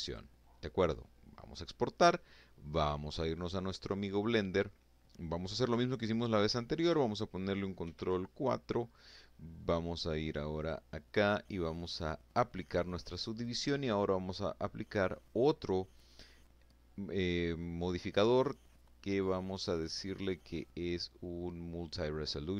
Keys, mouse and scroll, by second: 1.5 click, 3.1 middle click, 4.0-4.4 scroll up 2, 4.4 click, 6.2 ctrl+4, 9.0 click, 10.7 click, 11.8 click, 20.3 click.